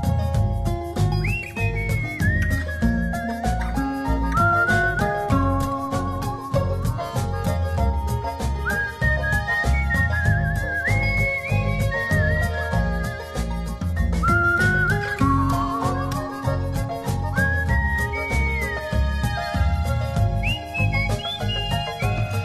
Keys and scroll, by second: 17.2 space, 19.3 space.